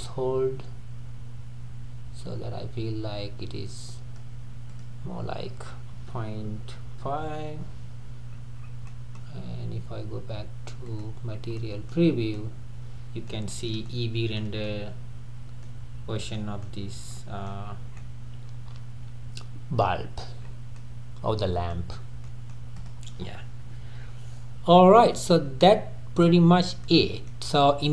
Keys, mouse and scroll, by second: 7.4 click, 8.3-8.9 scroll up 5, 8.9-11.0 middle drag, 11.0 click, 11.3-11.6 scroll down 1, 11.6-12.1 middle drag, 12.1 scroll down 1, 12.4-15.9 middle drag, 15.9-16.4 scroll down 2, 16.4-16.8 middle drag, 16.8 scroll down 3, 17.1-17.7 middle drag, 17.7-18.0 scroll up 3, 18.0-20.2 middle drag, 20.2 scroll down 1, 20.4-20.8 scroll up 3, 20.8-21.9 middle drag, 21.9-22.3 scroll down 1, 22.3-22.8 middle drag, 22.8 click, 24.6-25.0 scroll down 2, 25.0-26.5 middle drag, 26.5 scroll down 2, 26.8-27.9 middle drag.